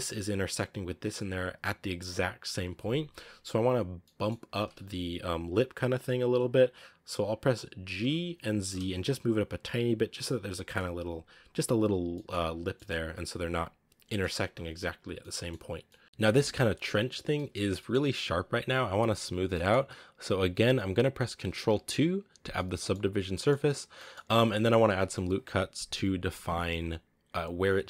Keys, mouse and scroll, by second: 2.7-3.9 scroll up 1, 3.9 middle click, 4.5-6.5 scroll up 1, 6.5 scroll up 1, 6.8-7.9 scroll down 1, 8.0 g, 11.3-11.6 scroll up 1, 11.8 scroll down 3, 12.0 middle drag, 12.3-12.6 scroll up 3, 12.6-13.7 middle drag, 13.7 scroll up 1, 13.8 scroll down 1, 14.0-14.3 middle drag, 14.3 a, 15.1-15.4 middle drag, 15.4-15.8 scroll up 1, 15.8 middle click, 16.0 scroll down 1, 16.0 scroll up 1, 16.2-17.3 scroll down 3, 17.3 middle click, 17.8 scroll up 2, 19.5-21.4 middle drag, 21.4 ctrl+2, 22.4 scroll down 1, 22.5-23.0 middle drag, 23.0 scroll up 3, 23.2-23.7 middle drag, 23.7 scroll down 1, 23.9-24.5 middle drag, 24.5-26.8 scroll up 1, 26.8-27.8 scroll up 1.